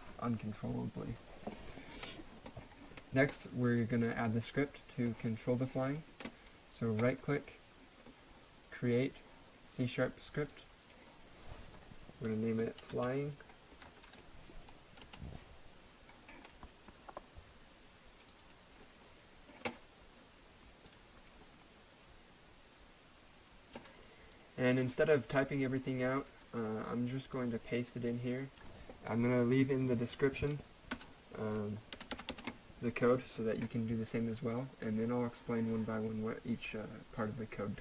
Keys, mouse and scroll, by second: 3.7 click, 7.0 click, 8.9 right click, 10.5 right click, 10.6 click, 12.6-14.6 typing, 15.0 Return, 18.2 click, 20.9 click, 24.3 click, 27.3 click, 30.9 BackSpace, 31.9 Return, 32.9 click.